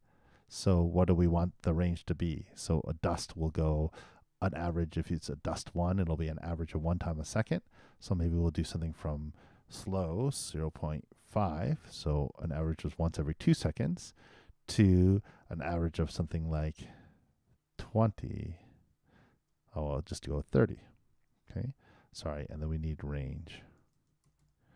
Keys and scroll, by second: 1.8 shift+9, 20.7 shift+0.